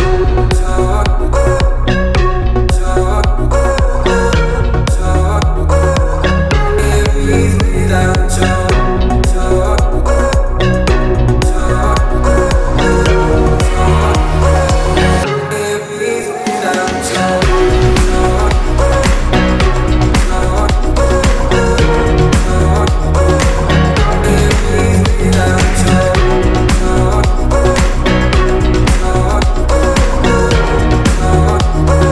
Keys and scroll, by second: 4.7 m, 6.0 Up, 8.3 space, 17.0 m, 17.8 b, 26.0 space, 27.3 b, 27.7 space, 28.1 Escape.